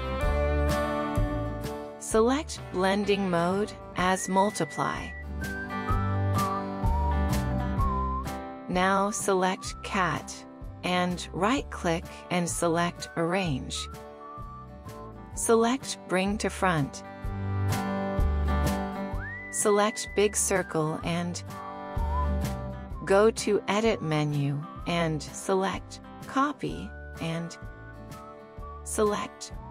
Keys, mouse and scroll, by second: 10.4 right click.